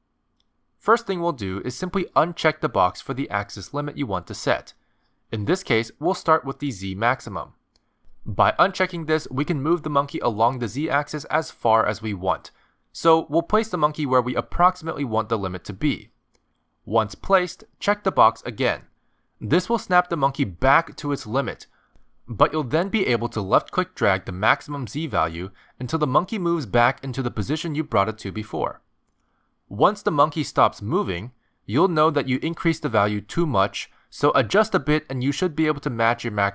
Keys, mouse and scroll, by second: 0.0 click, 8.3 click, 9.8 g, 11.1-11.6 scroll down 5, 11.6 g, 13.1-13.4 scroll down 3, 13.4-14.3 scroll up 6, 14.0 middle click, 14.6 g, 15.7 middle click, 17.0 g, 18.0 middle click, 20.8 middle click, 20.8 click, 21.6-22.0 scroll up 1, 22.1 shift+middle click, 24.0 click, 24.7 click, 33.9 click, 34.1 click, 34.3 click, 34.5 click, 34.7 click, 34.8 click, 35.1 click, 35.3 click, 35.4 click, 35.6 click, 35.8 click.